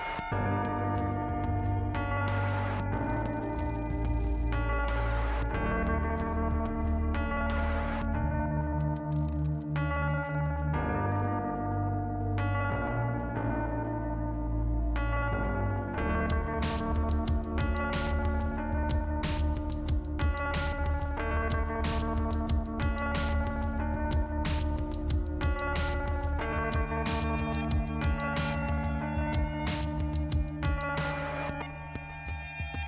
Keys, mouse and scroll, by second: 1.2 click, 1.7 click, 3.1 click, 5.9 click, 6.2 Delete, 9.1 click, 10.0 click, 15.5 click, 16.7 click, 17.4 click, 20.0 click, 21.8 click, 25.0 click, 25.1 click.